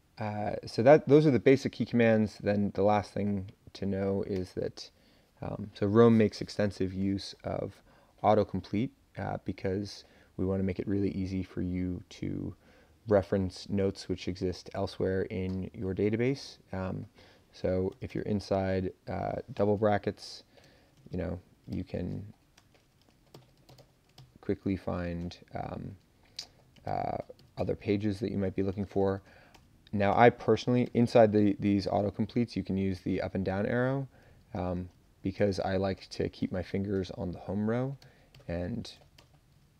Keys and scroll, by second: 1.2 Down, 1.5 Down, 4.3 Return, 17.9 [, 18.1 [, 20.4-21.5 typing, 21.7 ctrl+j, 22.5-24.2 typing, 26.8 ctrl+j, 27.0 ctrl+j, 28.7-31.5 typing, 32.4 Down, 32.7 Down, 33.3 Up, 34.4 Down, 34.7 BackSpace, 35.3 BackSpace, 38.0 j, 38.3 k, 38.9 BackSpace, 39.2 BackSpace.